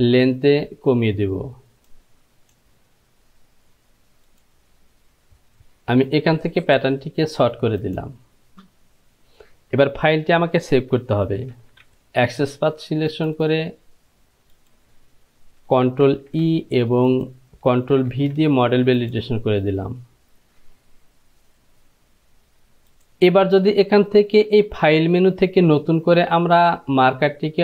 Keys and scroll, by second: 11.7 ctrl+j, 16.3 ctrl+e, 18.3 ctrl+v.